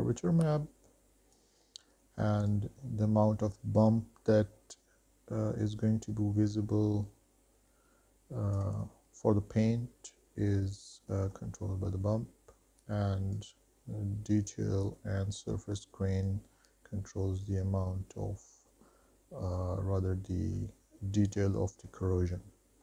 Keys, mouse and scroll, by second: 2.7-8.8 drag, 9.2-10.3 scroll up 7, 10.8-11.4 middle drag, 11.5 shift+middle click, 13.5-21.7 drag, 22.1-22.7 scroll down 4, 22.7-22.8 middle drag.